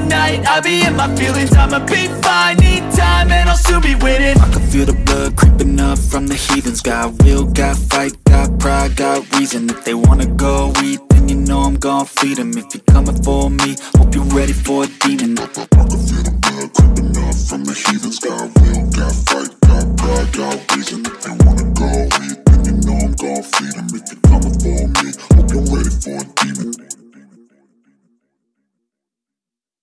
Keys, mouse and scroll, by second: 1.2-1.9 drag, 2.6-3.0 scroll up 1, 3.0 middle click, 3.2 click, 3.5-3.8 scroll up 1, 3.8-4.5 middle drag, 4.5-4.9 scroll down 1, 4.9-6.2 shift+middle drag, 6.2 a, 8.7 s, 10.3 shift+middle click, 10.7 Tab, 11.6 s, 14.5 g, 16.9-17.3 scroll down 6, 17.3 click, 18.6 click, 24.0 click, 24.8-27.4 scroll up 8.